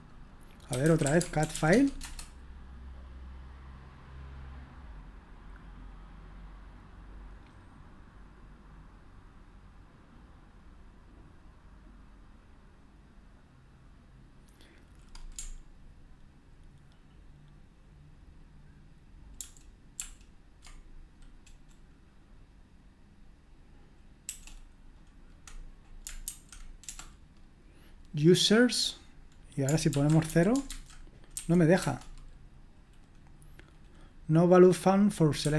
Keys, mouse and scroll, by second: 0.5-2.0 typing, 19.4 ctrl+p, 20.0 ctrl+p, 24.2 BackSpace, 30.0-31.3 typing, 31.7 Return.